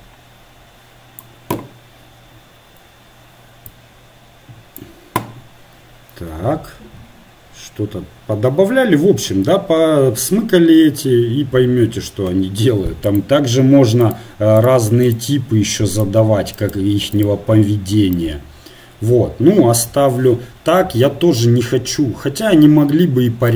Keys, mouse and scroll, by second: 3.9-23.5 drag.